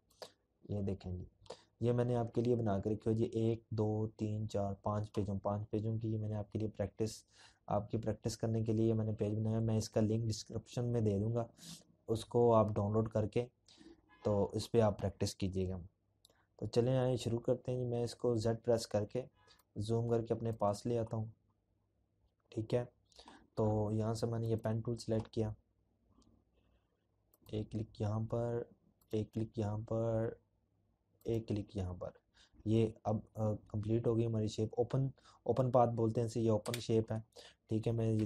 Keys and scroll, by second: 15.5 z, 34.2 Escape, 35.8 z.